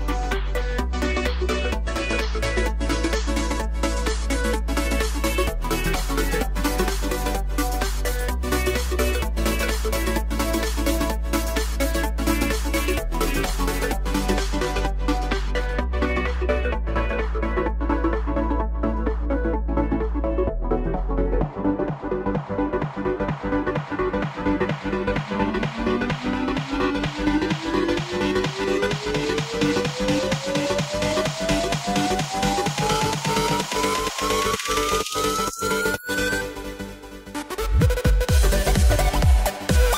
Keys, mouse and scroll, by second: 3.1 click, 4.6-8.0 middle drag, 8.0 click, 9.0 shift+click, 9.7 shift+click.